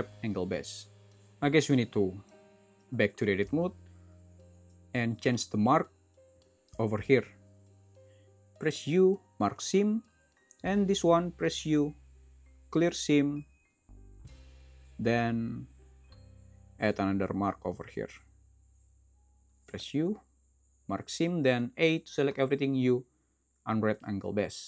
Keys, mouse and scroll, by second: 3.8 shift+Tab, 14.9 shift+z.